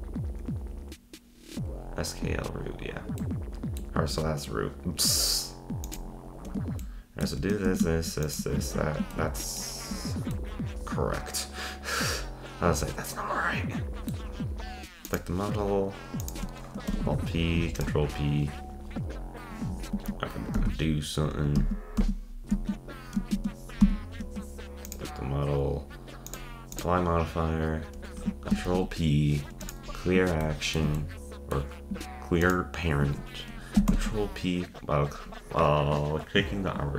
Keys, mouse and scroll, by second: 1.8-3.2 scroll down 13, 3.2-5.9 middle drag, 5.9 click, 6.8-7.7 shift+middle drag, 7.7 shift+s, 8.6 ctrl+Tab, 9.1-13.4 shift+middle drag, 15.1 click, 16.2 click, 16.9 alt+p, 20.0 z, 20.6 z, 21.6 z, 22.0 z, 23.4 shift+z, 23.8 shift+z, 24.8 click, 26.3-28.7 drag, 28.7 alt+p, 30.4-32.4 shift+middle drag, 32.4 shift+click, 33.9 p.